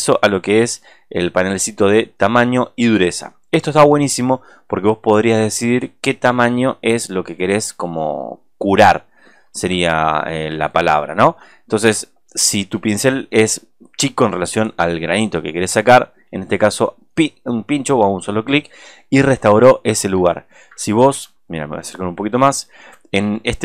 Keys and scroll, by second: 21.6 space, 22.5 alt+space.